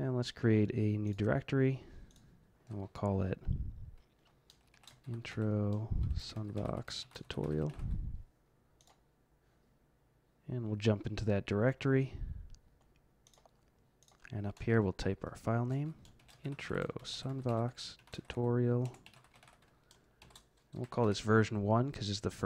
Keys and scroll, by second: 4.5-8.2 typing, 14.5-21.2 typing.